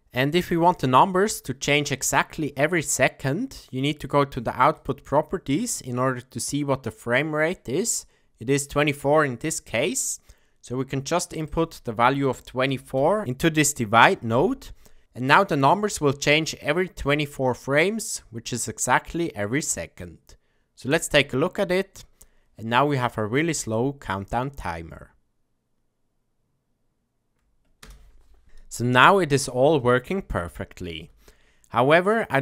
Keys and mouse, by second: 4.8 click, 11.5-15.0 drag, 20.9 click, 27.8 space, 29.6 space, 30.9 space.